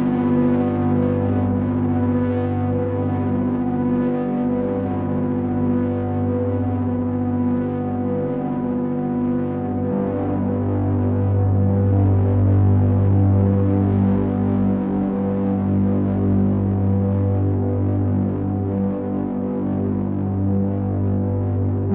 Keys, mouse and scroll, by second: 1.0 click, 2.9 click, 4.8 shift+click, 8.2 ctrl+a, 17.1 middle click, 19.6 middle click, 21.2 click.